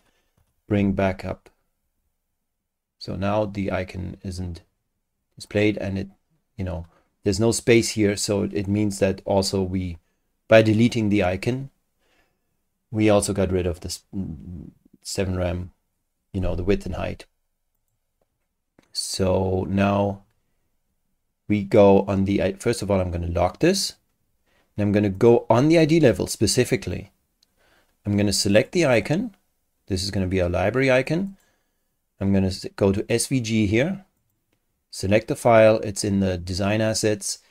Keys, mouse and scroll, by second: 2.3-2.8 scroll up 4, 3.1-3.8 scroll up 4, 4.0 scroll down 2, 5.5 click, 17.8 click, 23.6 click, 25.1 click, 28.5 click, 31.3 click, 33.0 click, 34.2 click.